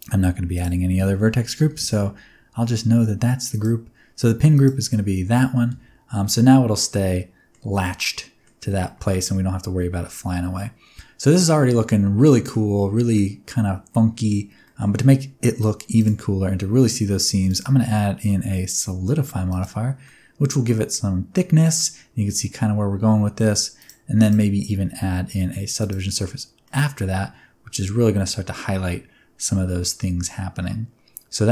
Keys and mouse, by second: 0.5 click, 3.5-4.6 drag, 5.2 Tab, 5.6 space, 6.9 middle click, 7.8 middle click, 8.9 middle click, 9.7 space, 9.9-12.5 middle drag, 13.1-14.2 middle drag, 14.6 middle click, 17.6-19.6 drag, 20.0-21.7 middle drag, 23.7 click, 24.2-26.2 drag, 26.6-31.5 middle drag.